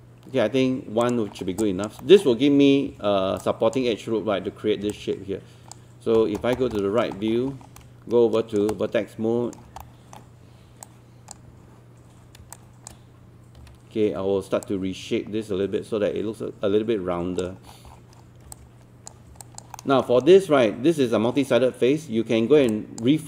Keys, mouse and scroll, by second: 1.0 click, 1.4 scroll down 1, 1.6 alt+click, 2.0 alt+middle click, 2.9 alt+3, 3.4 alt+click, 5.0 click, 6.2 scroll down 1, 6.8 alt+middle click, 7.2-7.5 scroll up 1, 7.8 alt+right click, 9.8 alt+middle click, 10.9 click, 12.6 shift+click, 13.6 w, 14.7 click, 17.7-18.3 scroll down 1, 18.6 click, 19.4 alt+click, 19.8 alt+middle click, 20.2-22.6 scroll up 1, 22.7 alt+click.